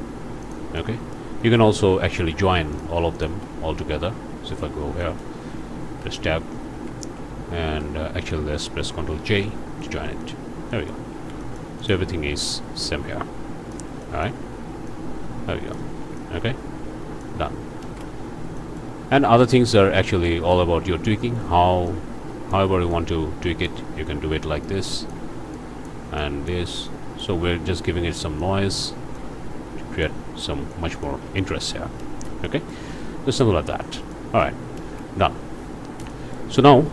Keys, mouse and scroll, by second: 0.4 click, 0.8 middle click, 2.0 click, 2.7 shift+click, 3.1 shift+click, 4.4 z, 5.0 click, 5.7 Tab, 6.7 a, 7.7 Tab, 9.2 ctrl+j, 9.8 ctrl+click, 11.0 alt+click, 11.1 alt+a, 11.4 alt+click, 12.6-13.9 drag, 14.0 click, 14.9-16.0 drag, 16.0 alt+a, 16.2 alt+click, 16.8 click, 17.8 ctrl+space, 18.6 click, 19.0 scroll up 2, 19.4 click, 19.9 scroll down 2, 20.3 click, 21.9 click, 22.9 click, 24.6 click, 25.5 click, 26.2 click, 26.9 click, 28.4 click, 29.2-30.2 drag, 30.7 click, 31.2 alt+a, 31.4-32.1 alt+scroll up 2, 32.0 ctrl+space, 32.4 ctrl+click, 32.9-33.3 ctrl+scroll down 3, 33.3 click, 34.4 ctrl+click, 34.8 ctrl+space, 36.1 click.